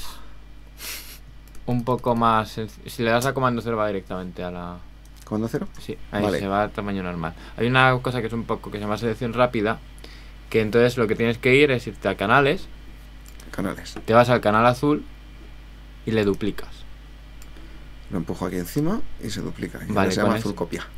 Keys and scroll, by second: 1.4 alt+super+space, 3.2 super+space, 5.6 super+0, 5.9 Tab.